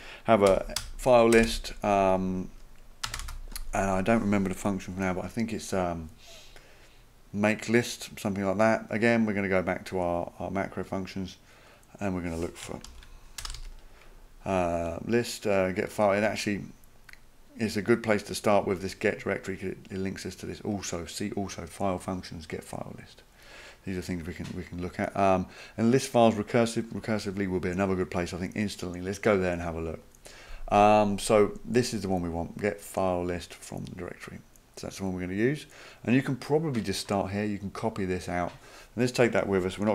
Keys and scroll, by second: 0.2-3.2 typing, 12.9 ctrl+f, 13.2-14.2 typing.